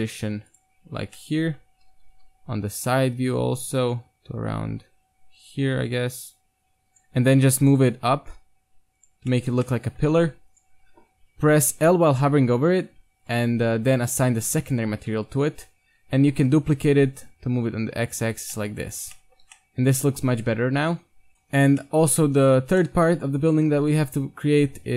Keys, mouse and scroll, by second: 0.0 g, 0.8 z, 1.2-3.2 middle drag, 1.9 KP_3, 2.1 g, 6.9-9.4 right drag, 7.4 z, 8.0 g, 9.2 z, 9.3 click, 9.5 Tab, 9.5 middle click, 10.2 Tab, 10.5-12.3 right drag, 11.8 l, 13.3-14.5 drag, 14.8 Tab, 15.1 KP_1, 15.7 Tab, 16.5 shift+d, 18.4 Tab, 18.4 click, 19.5 a, 21.3-22.3 right drag, 22.2 KP_1, 23.2 a, 23.8 shift+a.